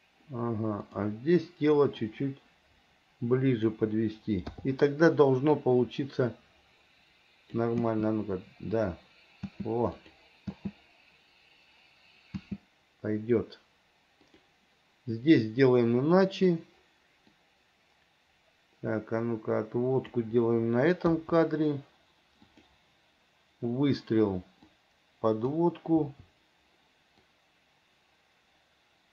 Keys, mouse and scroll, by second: 1.1 click, 2.2-4.0 drag, 5.8-7.8 drag, 8.1 space, 9.6 space, 10.3 click, 12.5 space, 14.5 click, 17.5 click, 18.6-20.3 drag, 22.7 click, 24.8 click, 25.2 click, 27.5-29.1 drag.